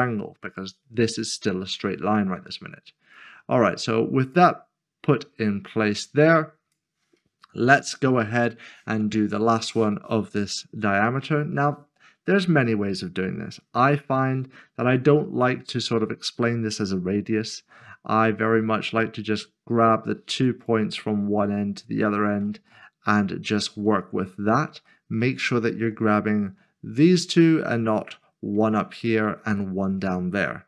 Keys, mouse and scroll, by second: 3.1 0, 3.2 click, 8.4 shift+middle click, 10.0-10.4 scroll up 1, 13.2 click, 14.1-16.5 scroll down 1, 17.5-20.2 scroll down 1, 20.6-21.4 scroll up 1, 22.1 shift+click, 22.7 middle click, 24.2-24.7 scroll up 1, 24.9 shift+middle click, 26.1 middle click, 26.6-27.9 scroll down 1, 27.9-30.0 scroll down 1, 30.0 middle click.